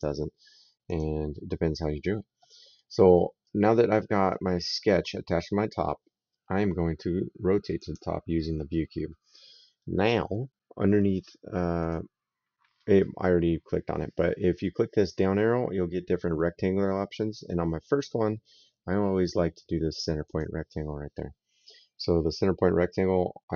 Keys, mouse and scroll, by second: 3.2 right click, 7.6 click, 11.6 click, 20.0 click.